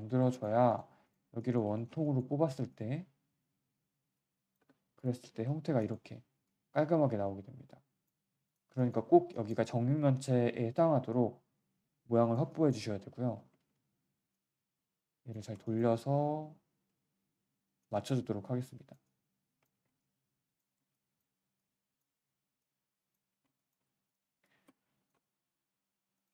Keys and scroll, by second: 0.5 q, 4.5 Delete, 5.2 3, 8.3 1, 10.1 e, 13.5 w, 13.7 w, 15.3 e, 16.9 w, 19.7 3, 20.6 1, 23.3 3, 23.7 1.